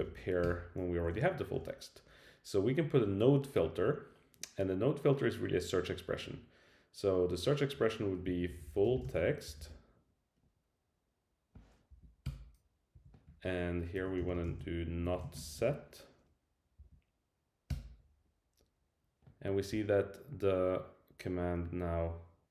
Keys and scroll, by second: 0.4 Return, 1.0 Right, 11.9 Down, 12.3 Return, 12.9 Right, 16.8 Down, 17.7 Return.